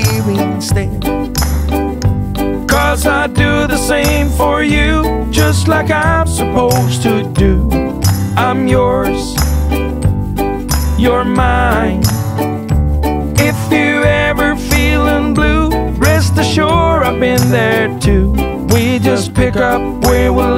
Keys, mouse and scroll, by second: 0.4 click, 0.5 double click, 2.9 click, 4.6 click, 6.5 right click, 9.6 click, 11.6 click, 13.3 click, 14.6 click, 19.4 click.